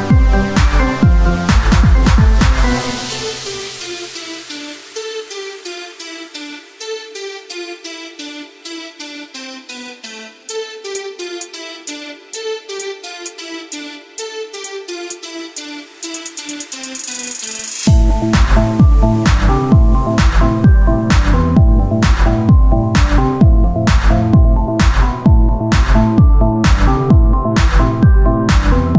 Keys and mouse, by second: 0.7 f, 2.3 w, 3.4 ctrl+Tab, 4.0-5.7 drag, 5.0 e, 9.5 r, 10.6 click, 11.1 w, 12.3 Tab, 13.9-17.5 drag, 17.7 click, 18.5-19.8 right drag, 18.6 Tab, 19.8 ctrl+Tab, 22.1-24.0 drag, 22.1-24.0 right drag, 26.7-28.2 drag, 27.6 right click, 28.2 Tab.